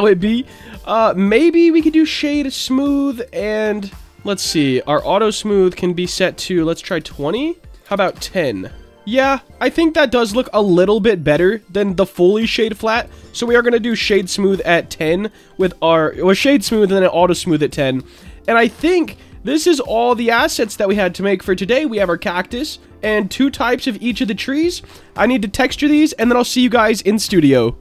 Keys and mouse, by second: 1.2-2.0 right drag, 2.9 right click, 4.0 click, 4.6 click, 5.3-8.7 drag, 9.4 middle click, 10.6 click, 11.0 right click, 12.7 click, 13.0-14.7 drag, 15.2 click, 17.6 shift+click, 18.8 shift+click, 19.5 click, 20.3-20.7 middle drag, 21.4 click, 22.3-22.8 middle drag, 23.7-24.1 middle drag, 24.4-24.7 shift+middle drag.